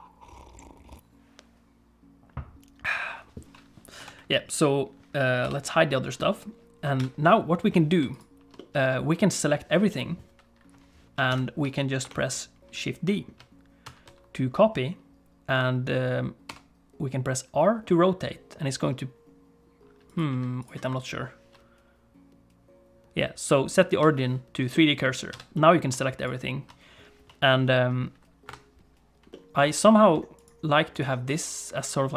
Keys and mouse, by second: 4.0 KP_8, 5.4 h, 5.9 click, 7.0 a, 8.6 click, 11.3 ctrl+s, 12.0 KP_7, 13.8 shift+d, 20.3 x, 21.5 ., 24.7 middle click, 25.3 a, 25.5 middle click, 26.2 shift+click, 28.4 KP_7, 29.3 middle click.